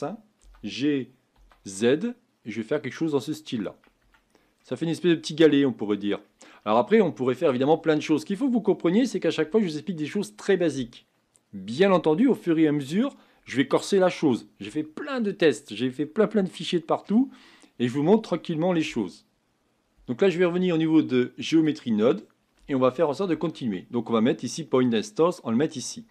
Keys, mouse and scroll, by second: 0.5 g, 4.0 Tab, 4.6-6.5 middle drag, 6.5-10.7 scroll down 2, 19.3 click, 21.5-25.4 drag.